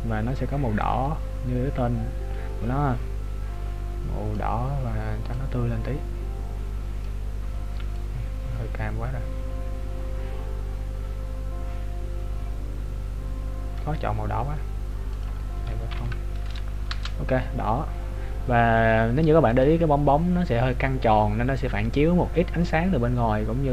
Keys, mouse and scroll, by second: 19.6 click.